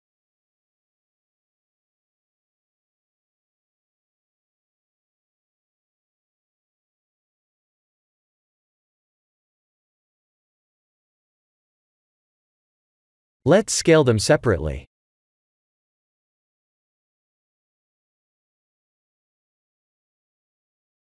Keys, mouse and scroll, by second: 1.9 ctrl+z, 2.6 e, 3.6 s, 5.7 scroll up 4, 6.1 middle click, 6.7 ctrl+z, 7.3 middle click, 9.7 click, 10.1 middle click, 11.5 s, 12.3 ctrl+z, 13.2 i, 18.6 middle click, 19.4 click, 19.6 middle click.